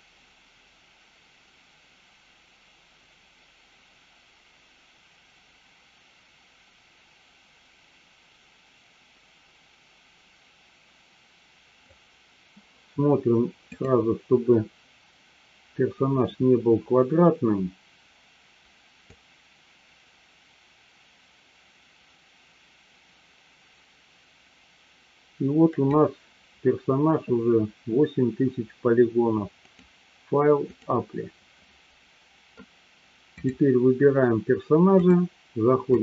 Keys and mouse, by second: 13.8 click, 19.2-26.2 drag, 29.6-32.1 drag, 34.9-36.0 drag.